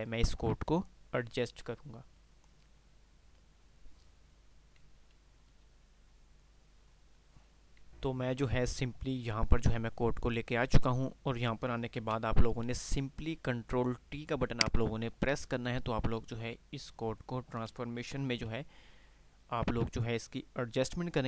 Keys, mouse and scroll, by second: 7.3 F10, 7.8 typing.